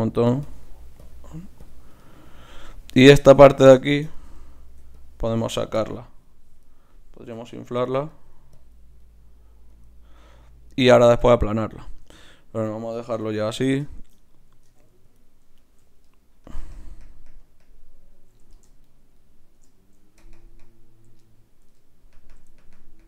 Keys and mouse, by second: 3.2 f, 5.0-7.7 drag, 7.3 i, 7.7 f, 8.1-11.5 drag, 12.0 Tab, 13.1 KP_3, 14.7 ctrl+Tab, 15.6-17.3 drag, 18.8-20.8 drag.